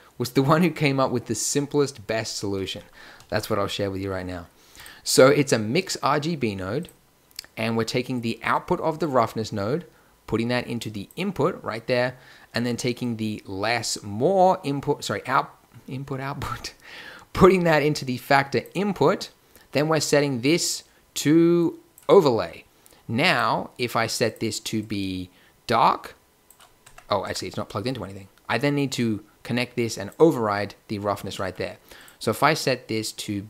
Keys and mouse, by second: 3.2 shift+a, 8.1-10.0 drag, 13.0-14.8 drag, 18.9-19.5 middle drag, 19.7-21.4 drag, 23.3-24.9 drag, 25.2 middle click, 26.8 Tab, 27.2 Tab.